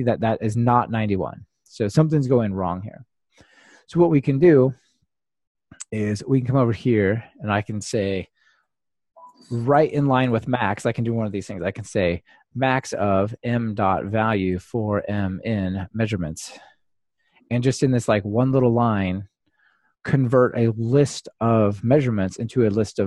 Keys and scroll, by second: 10.1 ctrl+alt+shift+Left.